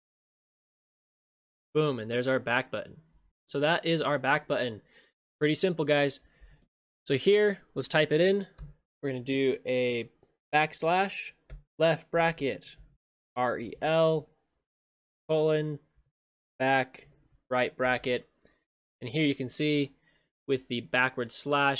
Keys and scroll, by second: 0.7 ctrl+shift+space, 6.6 ctrl+shift+space, 18.0 ctrl+shift+space.